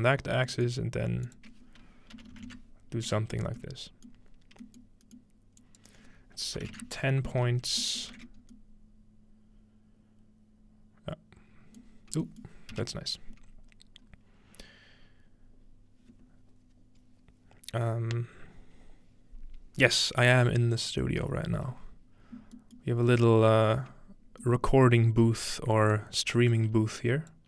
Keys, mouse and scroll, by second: 0.3-3.2 drag, 0.3-3.2 middle drag, 2.1-2.8 typing, 4.1 middle click, 4.5 scroll down 1, 5.6-7.5 drag, 8.0-8.6 alt+middle drag, 8.1 typing, 8.4-9.5 scroll up 1, 9.5-11.4 scroll up 1, 11.9-12.3 scroll down 2, 13.4-19.4 scroll up 2, 22.6-26.4 middle drag, 25.9 click, 27.0 click.